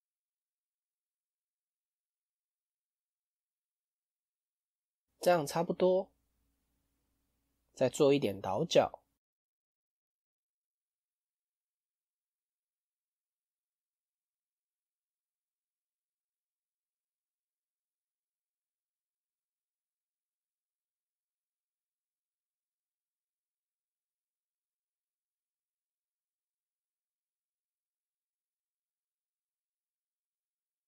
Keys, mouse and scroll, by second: 5.1-6.2 middle drag, 6.2 click, 6.9 alt+click, 8.2 alt+click, 8.9 alt+shift+click, 9.5-10.5 middle drag, 10.5 ctrl+b, 17.4 middle click, 18.3 click, 18.7 middle click, 19.4-19.8 scroll up 1, 20.1 alt+click, 20.7-21.7 middle drag, 21.7 alt+shift+click, 22.6 middle click, 23.3 alt+click, 23.7 middle click, 24.1-25.2 scroll down 1, 29.4-30.8 drag.